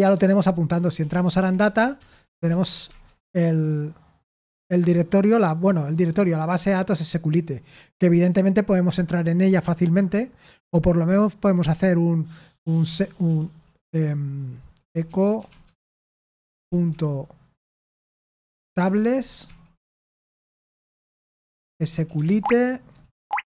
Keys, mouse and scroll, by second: 1.9 Return, 1.9-3.3 typing, 15.4 typing, 19.2-23.1 typing.